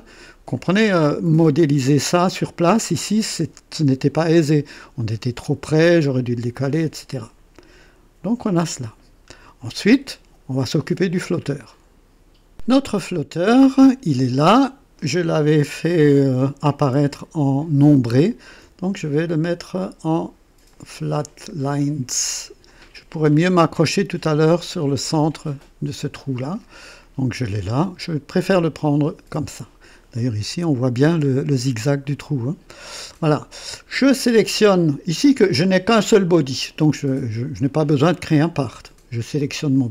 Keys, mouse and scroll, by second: 8.8 scroll down 1, 12.5 click, 13.3 click, 17.9 ctrl+d, 19.5 click, 20.7 click, 22.6 click, 23.4 click, 26.8-29.4 drag, 30.4 KP_1, 30.4 KP_1, 32.1-33.3 drag, 36.0 click, 39.3 click.